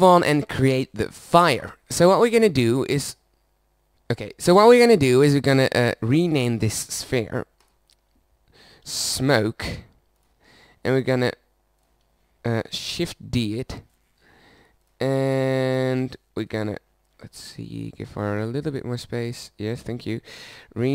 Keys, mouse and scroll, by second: 4.7-10.2 drag, 11.0-12.6 drag, 13.4 shift+d, 14.8-16.4 drag, 16.4-18.6 middle drag, 18.6-19.7 drag, 19.7-20.9 middle drag.